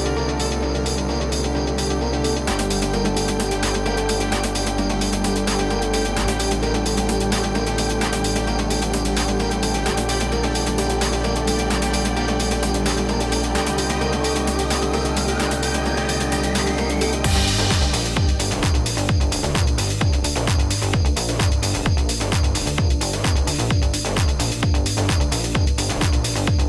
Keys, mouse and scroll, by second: 10.9-17.7 drag, 17.7-26.6 drag.